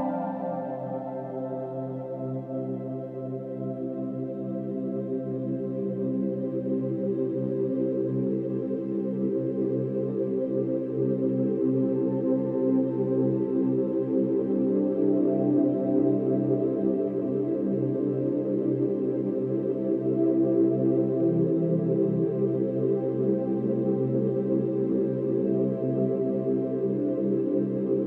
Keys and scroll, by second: 0.2 ctrl+alt+g, 1.9 ctrl+alt+g, 4.1 ctrl+alt+shift+n.